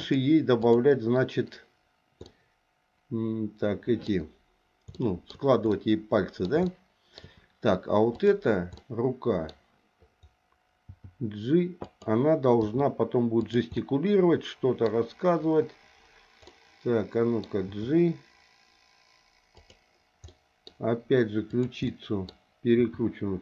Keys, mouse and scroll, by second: 0.6 click, 2.3-4.1 middle drag, 5.0 shift+middle click, 5.7 middle click, 6.7 shift+middle click, 8.1 click, 8.7 middle click, 10.9 g, 12.6 r, 13.8-14.9 middle drag, 16.5 middle click, 17.7 g, 20.3 scroll up 1, 20.5 middle click, 20.7-21.5 scroll down 1, 21.5 click, 21.9 middle click, 22.7 r.